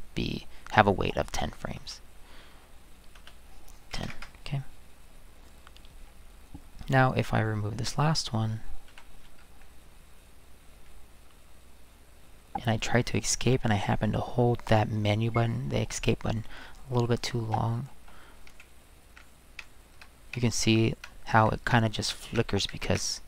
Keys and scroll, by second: 1.8 space, 3.2-4.6 typing, 8.9 Delete, 17.5 Right, 18.0 Right, 18.5-19.1 Escape, 19.6 Escape, 20.3 Escape, 21.7 Escape, 22.3 Escape.